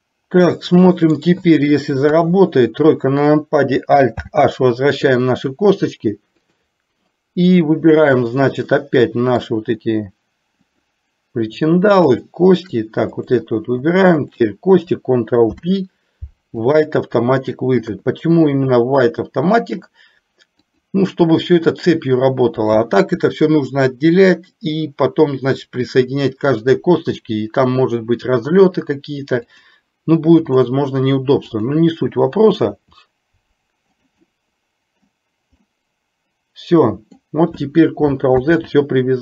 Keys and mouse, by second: 0.2-1.4 middle drag, 2.1 KP_3, 4.4 alt+h, 6.6 click, 9.0 middle click, 10.7 click, 12.1 shift+click, 13.4 click, 15.5 ctrl+p, 18.0 KP_3, 19.5 shift+middle click, 20.7 click, 29.5-30.8 drag, 31.6 click, 32.7 r, 34.5 middle click, 35.7-37.3 middle drag, 38.5 ctrl+z.